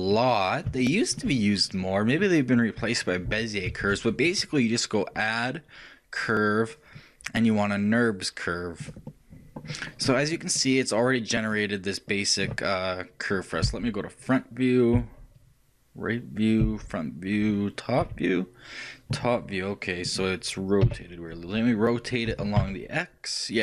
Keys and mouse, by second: 4.0 shift+a, 9.8-12.9 middle drag, 13.9 KP_1, 15.3 KP_3, 16.9 KP_1, 18.3 KP_7, 20.0-22.5 middle drag, 21.2 KP_1, 22.5 r.